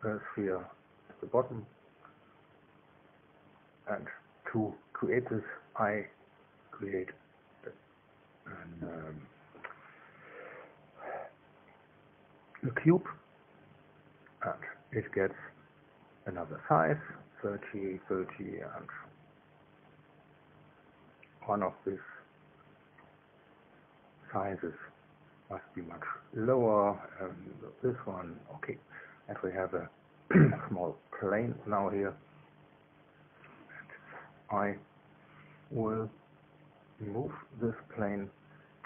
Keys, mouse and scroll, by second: 3.5 click, 5.0 click, 13.7 click, 14.7 click, 16.7 KP_3, 17.0 KP_0, 17.3 Tab, 17.7 KP_3, 18.0 KP_0, 18.3 Tab, 20.0 KP_3, 20.3 KP_0, 22.3-25.7 drag, 26.7 click, 27.6 1, 28.3 Return, 30.2 click, 31.8 1, 32.4 2.